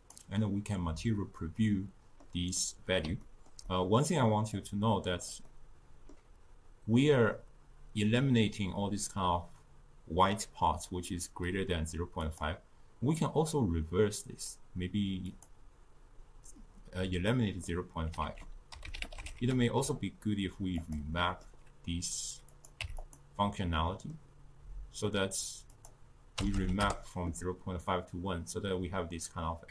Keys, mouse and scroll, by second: 1.7-4.6 middle drag, 4.6 click, 5.5-8.6 middle drag, 12.3-15.4 drag, 17.3 middle click, 18.3 ctrl+a, 21.3-22.6 middle drag, 22.6 click, 23.8-25.8 middle drag, 25.8-28.8 drag.